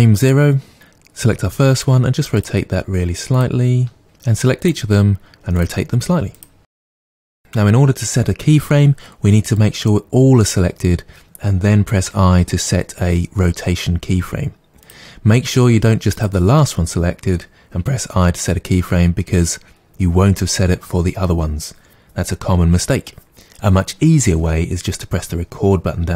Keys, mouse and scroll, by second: 0.7 right click, 1.7 r, 2.5 click, 3.3 click, 3.8-6.8 typing, 4.4 click, 5.5 click, 6.1 click, 9.6-9.9 drag, 16.2 click.